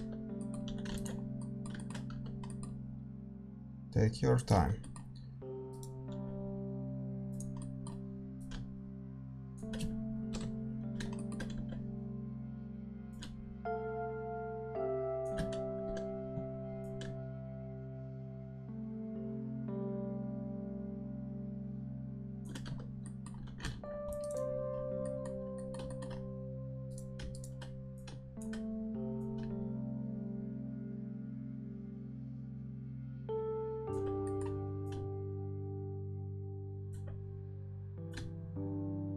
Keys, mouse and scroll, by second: 0.6 a, 1.1 ctrl+s, 2.0 Tab, 2.0-4.3 middle drag, 3.0 s, 4.5 Tab, 4.5-9.2 middle drag, 5.7 click, 6.1 s, 6.5-7.5 right drag, 8.3-10.3 drag, 10.3 KP_7, 11.1-13.0 middle drag, 11.5 z, 13.0-15.3 drag, 15.3 z, 15.8 Tab, 16.7-18.8 drag, 22.6 Tab, 22.7 middle click, 23.3 a, 23.6 ctrl+r, 24.6 a, 24.7-25.8 middle drag, 26.5-29.1 middle drag, 26.5 a, 26.8-29.1 right drag, 27.9-33.8 drag, 34.2-36.8 middle drag, 34.8-36.8 drag, 38.0-39.1 drag.